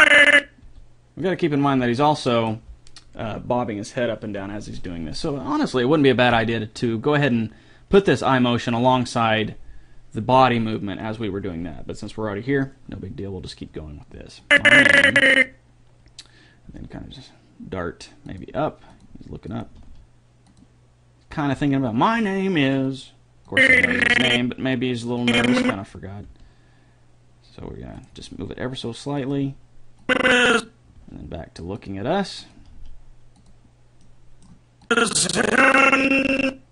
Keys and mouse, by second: 0.8 g, 14.7-16.5 drag, 16.9 g, 18.7 r, 19.3 g, 19.9 r, 21.7-22.9 middle drag, 23.7-27.3 drag, 26.5 g, 28.5 g, 30.2-32.5 drag, 31.2 g, 32.3 r, 32.8 r, 35.1 click.